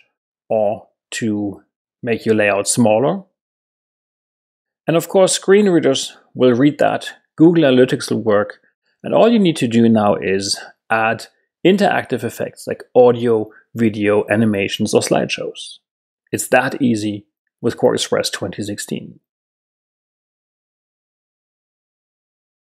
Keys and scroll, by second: 0.5 super+Right, 1.2 Right, 2.4 super+-.